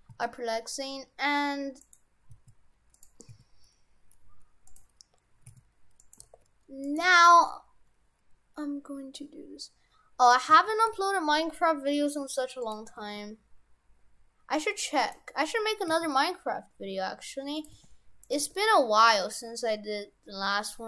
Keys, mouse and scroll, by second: 0.0 s, 2.3 s, 3.3 s, 5.4 s, 6.2 g, 7.0 g, 10.5 s, 13.1 g, 15.9 s, 17.7 g, 18.4 g.